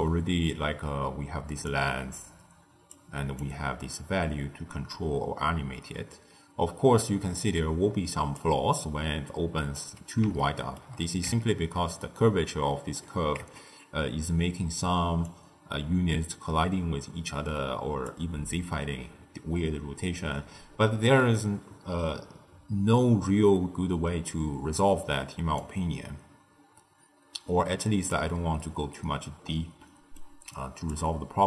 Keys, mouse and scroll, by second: 0.2-1.1 scroll up 1, 1.6-6.4 drag, 9.5 click, 10.3-11.2 shift+middle drag, 11.2 Tab, 13.3 Tab, 15.2-18.2 drag, 25.5-28.6 drag, 29.8-30.4 middle drag, 30.4 click.